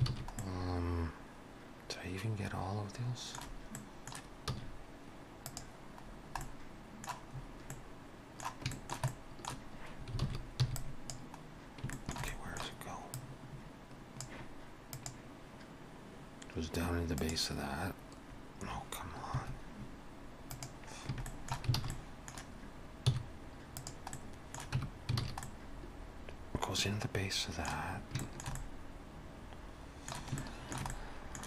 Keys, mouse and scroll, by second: 0.1 alt+a, 0.4 middle click, 3.8 middle click, 4.5 z, 6.1-6.4 scroll down 2, 6.4 middle click, 7.3-8.2 scroll up 3, 7.7 middle click, 8.7 shift+middle click, 9.1 middle click, 10.2 alt+a, 10.6 b, 11.6 scroll down 1, 12.0 shift+middle click, 12.3 middle click, 13.2 click, 21.3 shift+middle click, 21.8 alt+a, 21.9 middle click, 23.1 z, 24.2 middle click, 24.8 Tab, 25.2 alt+a, 25.4 middle click, 28.0 scroll up 1, 28.2 shift+middle click, 28.6 middle click, 30.4 shift+middle click, 30.9 middle click.